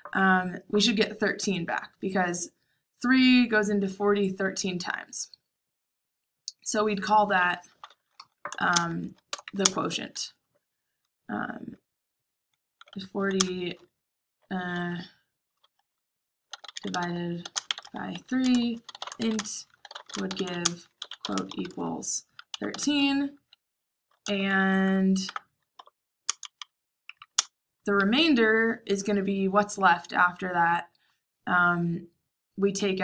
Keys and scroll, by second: 7.4 Escape, 7.5-9.9 typing, 12.6-13.3 typing, 16.2-19.5 typing, 20.8-22.9 typing, 24.2 Return, 24.4 Tab, 24.6 Tab, 24.7 Tab, 25.2 Tab, 25.7-27.3 typing.